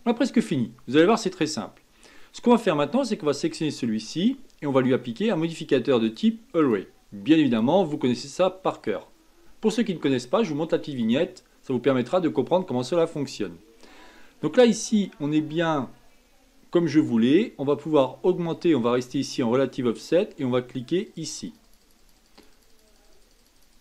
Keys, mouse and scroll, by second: 0.6-1.0 scroll down 1, 1.0-3.4 middle drag, 3.4 click, 5.5-6.7 drag, 7.4-10.6 drag, 15.2-18.3 middle drag, 21.0-23.8 drag.